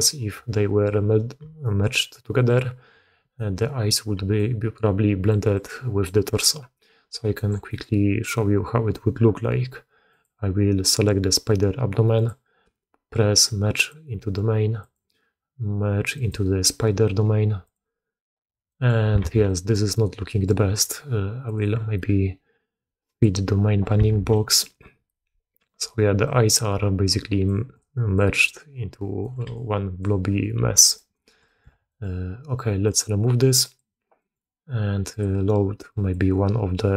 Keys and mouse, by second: 1.3 d, 1.5-3.3 drag, 3.3 d, 3.4 d, 4.1-6.2 d, 4.3 click, 5.4 click, 6.2-7.3 drag, 7.3 d, 7.6 click, 12.0-17.8 drag, 18.6 click, 19.1 alt+a, 19.4 drag, 19.8-20.4 drag, 21.3-23.2 drag, 24.0 alt+a, 24.2 drag, 24.7-25.5 drag, 26.1 drag, 26.7-31.3 typing, 26.9 click, 27.6 click, 28.3-29.2 drag, 29.4 click, 30.3-30.8 drag, 30.9 drag, 31.4 drag, 31.6 alt+a, 31.8 click, 32.7 click, 33.6 click, 34.1 click, 35.1-36.0 drag.